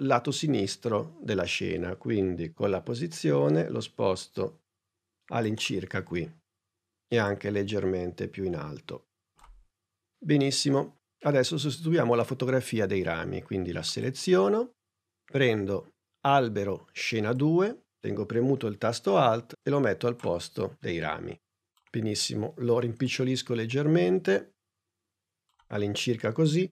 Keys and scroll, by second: 2.1 p, 21.6 s.